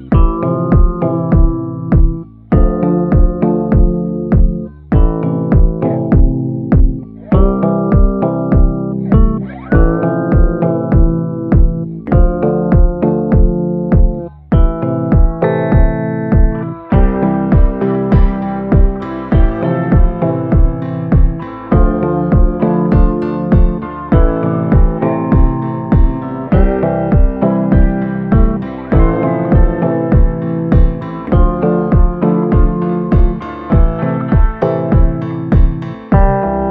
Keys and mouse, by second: 0.5 click, 1.1-2.1 right drag, 2.3 a, 2.6 middle click, 3.7 middle click, 4.4 shift+middle click, 4.7 middle click, 5.1 shift+middle click, 5.4 middle click, 5.7-7.5 shift+middle drag, 8.4 ctrl+i, 8.9 b, 11.3 b, 12.7 b, 13.8 b, 14.4 b, 15.1 b, 16.1 b, 17.5-21.1 typing, 23.9 right click, 24.6-26.5 right drag, 27.9 a, 28.1 middle click, 29.1 middle click, 34.5-35.7 middle drag, 36.1 shift+middle click, 36.6 middle click.